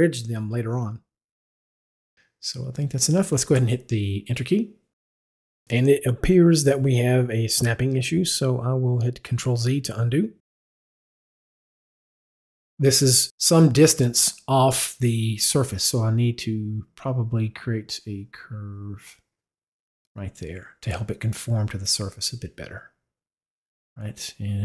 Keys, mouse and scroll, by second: 4.2 Return, 9.0 ctrl+z, 13.2 drag, 15.0 drag, 15.4 drag, 18.0-20.1 drag.